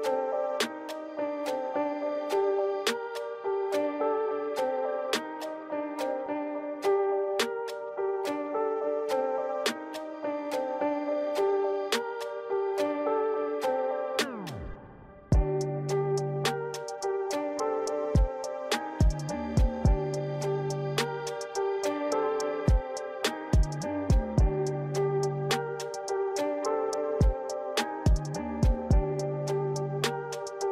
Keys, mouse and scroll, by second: 0.3 g, 1.7 click, 2.8 scroll down 3, 5.6 KP_1, 6.1 KP_3, 6.5-6.9 scroll down 4, 6.9 middle click, 8.0 KP_3, 8.9 r, 10.4 scroll up 5, 10.6 middle click, 12.7 ctrl+z, 13.0 middle click, 13.6 KP_3, 14.3 r, 16.1 middle click, 17.8 KP_3, 18.5 KP_1, 18.7 KP_3, 19.1 KP_9, 21.2 KP_1, 21.8 KP_3, 22.4 KP_7, 23.1-23.5 scroll down 4, 23.9 r, 26.4 KP_3, 26.7 KP_9, 27.1-27.6 scroll up 8.